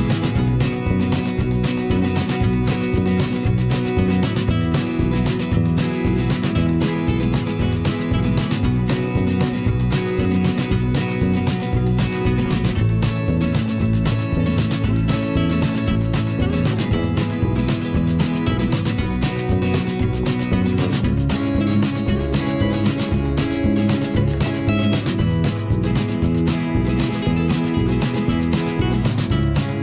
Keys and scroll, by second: 1.0 ctrl+shift+z, 2.0 p, 7.9 ctrl+z, 14.5 ctrl+z, 16.3 z, 16.7 v, 17.2 p, 18.4 ctrl+z, 20.3 z, 28.0 ctrl+z.